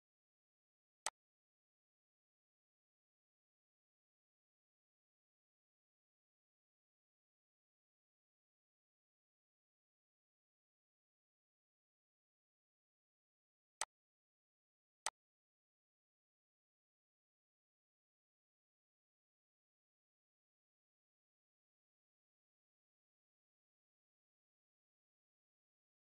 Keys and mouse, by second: 0.7 click, 1.9 click, 3.6 ctrl+s, 4.7 ctrl+s, 14.1 click, 16.8 ctrl+d, 17.8 click, 18.3 ctrl+d, 19.0 ctrl+d, 19.3 click, 21.9 click, 22.7 click, 23.0 click, 23.9 click.